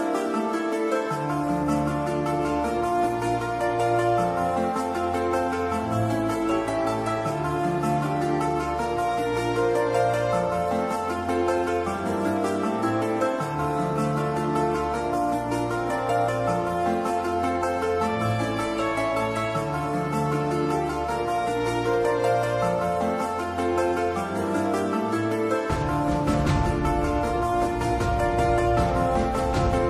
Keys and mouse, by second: 5.7 click.